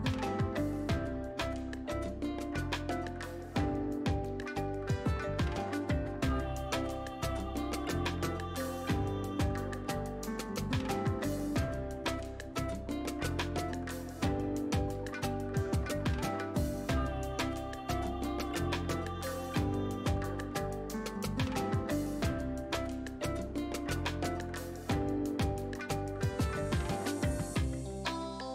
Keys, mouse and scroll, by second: 6.6 ctrl+z, 8.5 click, 14.4-16.2 scroll down 1, 17.4 click, 18.9-21.5 scroll down 1, 23.6 scroll up 1, 25.4-25.8 scroll down 1.